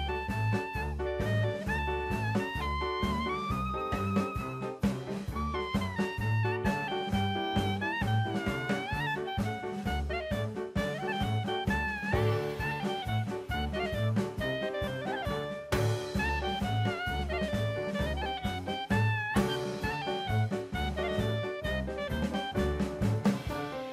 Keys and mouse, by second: 5.3-6.0 middle drag, 6.8-7.7 drag, 10.2-11.7 drag, 13.3 click, 14.5-17.1 drag, 17.7 KP_0, 19.3-21.1 drag.